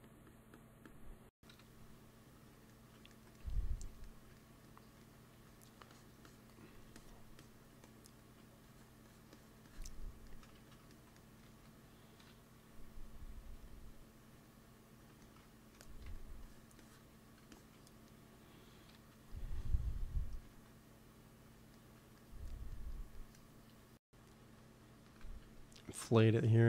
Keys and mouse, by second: 1.4 KP_1, 3.0 middle click, 3.1 middle click, 5.2 f, 5.8-9.5 drag, 10.5 ctrl+z, 11.3 ctrl+s, 12.2 KP_1, 13.3 KP_3, 15.9 f, 16.4-19.3 drag, 18.8 KP_1, 20.3 ctrl+s, 25.0 |, 25.5 f, 26.1-26.6 drag.